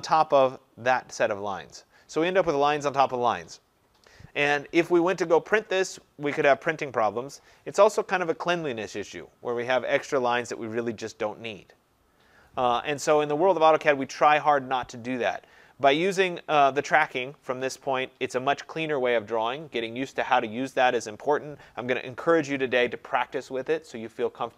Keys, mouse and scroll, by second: 0.6 click, 5.6 click, 13.7 Escape.